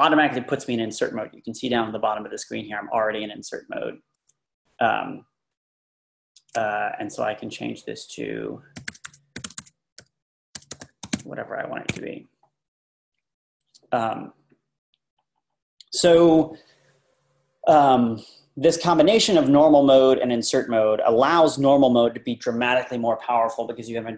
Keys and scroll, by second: 8.6-11.6 typing, 11.9 Escape.